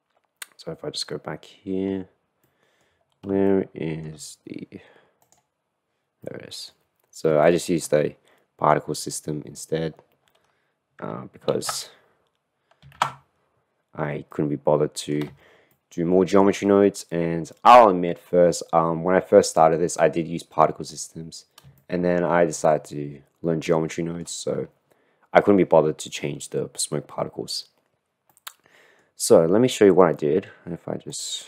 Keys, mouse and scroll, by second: 0.6 middle click, 2.6-3.2 middle drag, 3.6 shift+middle click, 6.3-6.8 middle drag, 7.4 shift+middle click, 11.8 alt+h, 13.2 ctrl+z, 14.4 middle click, 14.7-15.3 middle drag, 15.8-16.7 shift+middle drag, 17.2-17.7 middle drag, 17.8-21.0 middle drag, 21.8-28.4 shift+middle drag, 28.4 click, 29.2 middle click, 29.4 middle click, 30.3 middle drag, 31.3-31.4 drag.